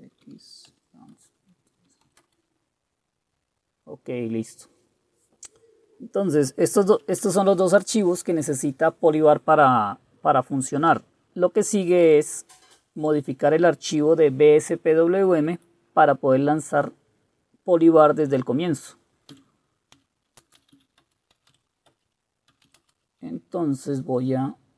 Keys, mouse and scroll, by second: 0.0-2.7 typing, 19.8-23.2 typing, 21.1 Return.